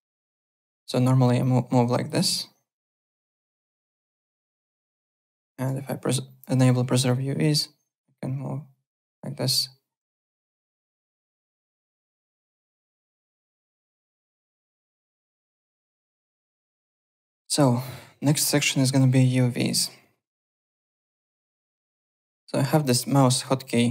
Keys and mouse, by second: 0.4 click, 0.7 ctrl+z, 1.4 click, 2.0 ctrl+click, 2.1 ctrl+z, 2.9 9, 3.3 click, 4.1 click, 5.7 9, 6.5 alt+middle click, 7.0 click, 10.1 alt+click, 10.3 alt+middle click, 11.1 click, 11.5 alt+middle click, 11.7 alt+right click, 12.6 click, 13.2 click, 13.7 click, 15.2-15.9 typing, 15.7 click, 16.5 alt+Tab, 17.0 alt+click, 22.1 click, 22.8 click, 23.1 `, 23.3 click, 23.6 alt+click.